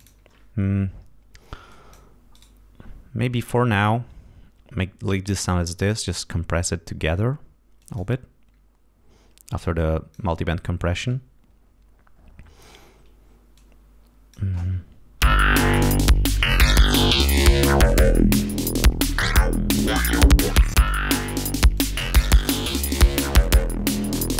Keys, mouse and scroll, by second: 1.6 click, 2.2 right click, 5.9 click, 7.7 click, 9.5 click, 13.5 click, 15.1 l, 15.7 click, 16.5 click, 17.5-19.2 drag, 20.1 click, 20.8 click, 21.7 click, 23.9 click.